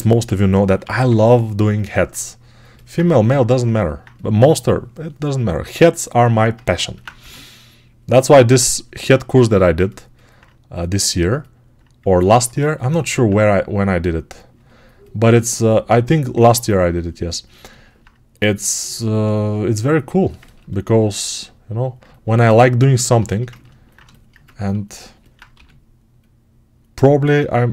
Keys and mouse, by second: 0.1 6, 0.7 [, 0.8 [, 3.5 alt+right click, 3.8-6.4 alt+drag, 6.4-11.1 ctrl+alt+right drag, 7.0 g, 16.6-24.6 right drag, 24.8-27.7 ctrl+right drag, 25.4 g.